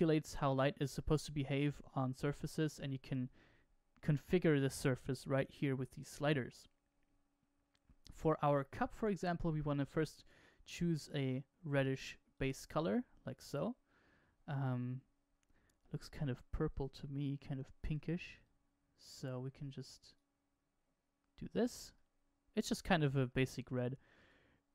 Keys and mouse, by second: 9.7 click, 14.5-16.6 middle drag, 16.6 click, 21.9-23.3 middle drag.